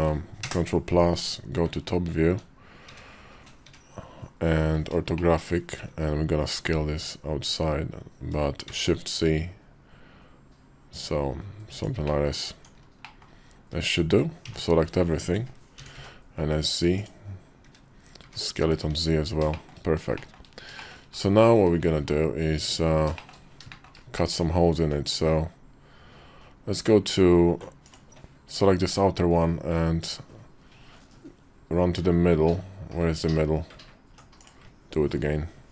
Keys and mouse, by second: 0.2 ctrl+KP_Add, 0.9-3.4 typing, 4.9 shift+click, 5.3 KP_5, 6.2 s, 8.6-11.5 middle drag, 11.8 click, 12.3 Tab, 12.8 middle click, 13.2 KP_5, 14.2 a, 15.5 s, 17.4 `, 18.0 `, 18.6 `, 19.3 shift+click, 20.1 middle click, 20.6 shift+middle click, 21.3 `, 22.3 `, 23.0 middle click, 23.5 shift+middle click, 25.0 KP_5, 26.1 KP_5, 27.6 click, 32.7 KP_5.